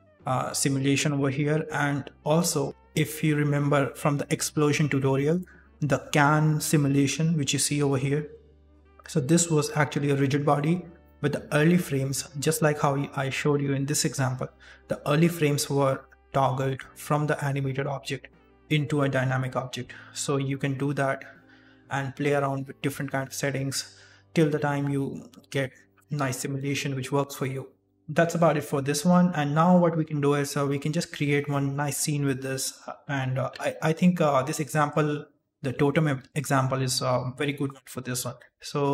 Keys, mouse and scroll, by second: 33.6 middle click, 38.8 middle click.